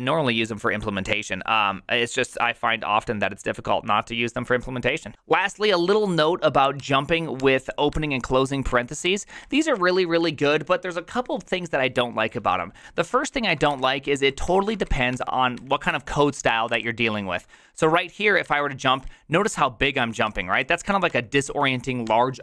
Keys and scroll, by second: 6.7-9.7 typing, 13.4-17.2 typing, 18.4-22.0 typing.